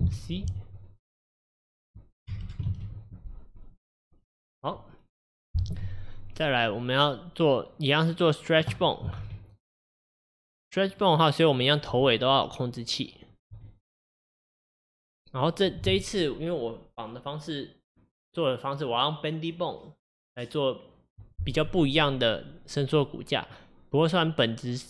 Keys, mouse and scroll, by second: 0.2 F2, 2.5 BackSpace, 8.2 click, 9.3 g, 11.6 click, 12.0 g, 13.4 click, 13.6 g.